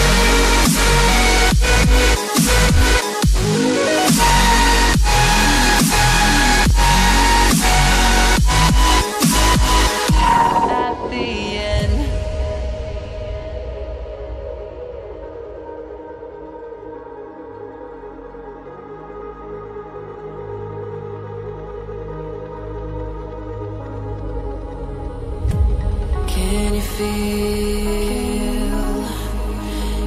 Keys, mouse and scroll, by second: 12.7 double click, 13.1 click, 18.0 double click, 18.4 click, 22.8 shift+click, 24.1 click, 27.6 scroll down 1, 28.1 scroll up 1, 29.0 click.